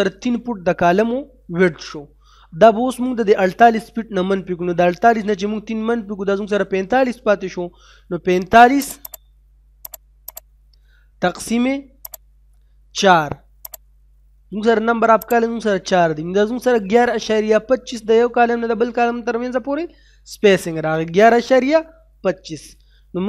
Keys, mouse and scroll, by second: 8.8 click.